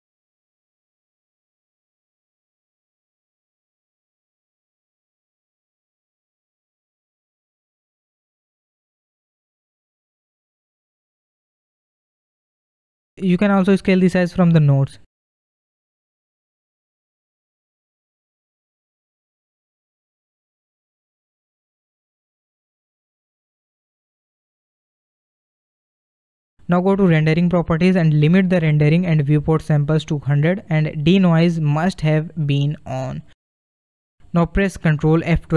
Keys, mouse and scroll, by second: 0.4 ctrl+z, 1.5 ctrl+shift+t, 10.2-10.9 scroll down 1, 20.3 scroll up 3, 22.5-24.0 shift+middle drag, 24.3 KP_0, 25.5-25.9 scroll up 2, 27.2 click, 28.1-30.6 drag, 30.6 KP_0.